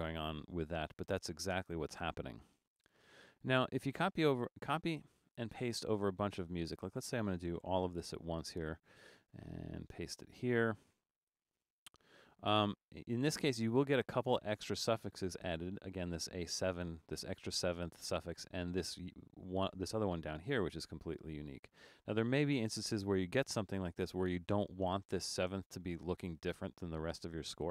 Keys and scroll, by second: 7.9 super+c, 11.6 super+v, 27.2 Return.